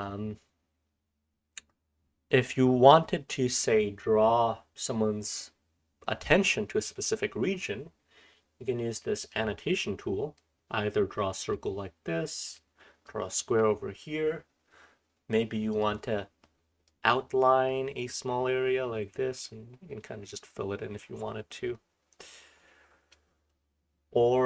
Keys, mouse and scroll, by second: 2.0-2.9 scroll up 1, 2.9-5.7 scroll up 1, 2.9-6.2 drag, 5.7-9.2 scroll up 1, 9.2 click, 9.2-10.3 scroll up 1, 10.3-11.6 drag, 10.3-11.6 scroll up 1, 11.6-12.4 scroll up 1, 12.4 click, 12.4-13.6 scroll up 1, 13.0-13.6 drag, 13.6-15.7 scroll up 1, 15.7 click, 15.7-16.9 scroll up 1, 16.9-23.2 drag, 16.9-19.7 scroll up 1, 19.7-23.2 scroll up 1, 23.2-24.4 scroll up 1.